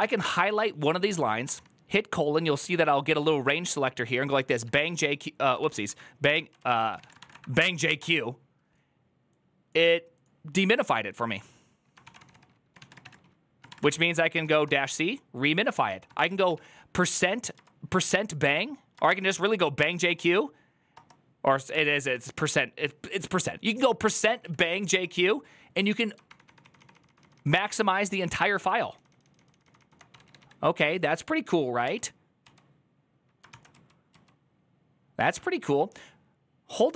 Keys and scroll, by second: 1.0-1.7 typing, 4.4-7.6 typing, 5.4 ctrl+c, 5.6 Up, 7.8 Return, 11.7-20.1 typing, 13.6 Up, 15.6 ctrl+c, 20.7 Return, 21.5-21.9 typing, 24.0-25.1 typing, 26.1 ctrl+d, 26.2 ctrl+d, 26.4 ctrl+d, 26.5 ctrl+d, 27.0 ctrl+d, 27.4 ctrl+d, 27.6 ctrl+d, 28.4 ctrl+d, 29.0 ctrl+d, 29.9 typing, 31.6-32.2 typing, 33.3 ctrl+c, 33.5-34.4 typing.